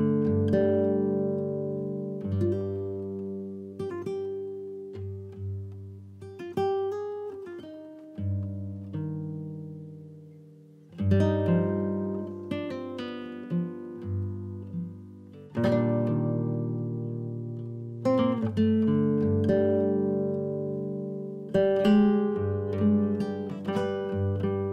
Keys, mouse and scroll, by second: 0.8 scroll down 1, 1.1 middle click, 1.9 KP_3, 2.1 KP_1, 2.7 scroll up 2, 3.0 drag, 3.6 s, 6.2 shift+d, 7.4 r, 9.7 ctrl+z, 10.2 r, 11.7 s, 13.4 g, 14.2 KP_1, 14.4 KP_3, 15.8 g, 17.6 KP_3, 18.0 KP_1, 18.4-18.8 scroll up 2, 18.8 ctrl+KP_1, 19.2-20.1 shift+middle drag, 20.1 r, 21.3 g, 22.2 click, 22.4 scroll down 2, 22.6-23.5 middle drag, 23.5 scroll down 1, 23.7-24.3 middle drag, 24.3 KP_1.